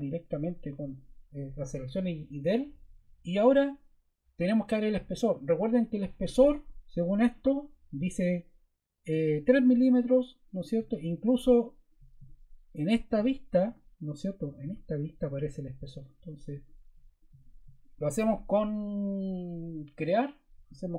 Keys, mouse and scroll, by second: 0.3 BackSpace, 6.2 click, 10.0 click, 10.8 click.